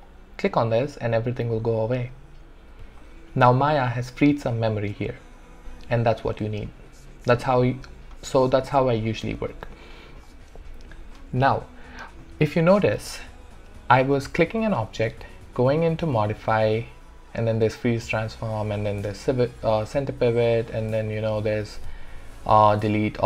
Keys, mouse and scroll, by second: 0.1 click, 7.6 click, 15.9 click, 20.7 click.